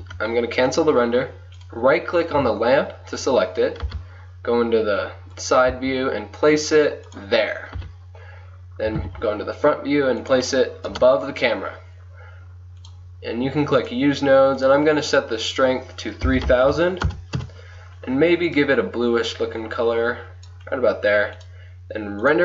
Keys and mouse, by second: 0.0 Escape, 1.7-3.6 right drag, 3.9 KP_3, 5.8 g, 7.8 KP_1, 8.9 g, 10.9 KP_0, 12.9-14.1 drag, 14.2 click, 16.7 KP_0.